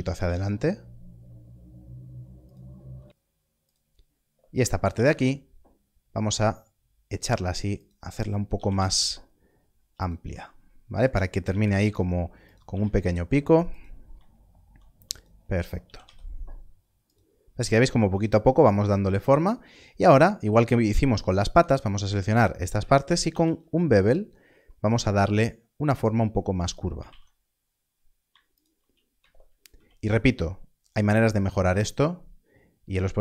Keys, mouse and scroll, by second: 0.1 y, 2.4 click, 3.6 click, 4.9 g, 5.1 y, 7.1 y, 8.5 Left, 8.7 g, 8.7 y, 10.0 click, 10.1 Left, 10.2 z, 11.1 click, 11.7 y, 12.4 click, 12.6 g, 12.7 z, 13.7 click, 15.9 g, 16.0 y, 17.0 click, 17.4 scroll down 1, 19.4 scroll up 1, 21.1 alt+click, 23.2 ctrl+b, 26.6 ctrl+b, 27.5 alt+a, 27.5-27.8 scroll down 1, 27.8-28.2 scroll up 1, 28.5 alt+click, 29.7 ctrl+b, 31.5-32.1 scroll down 1.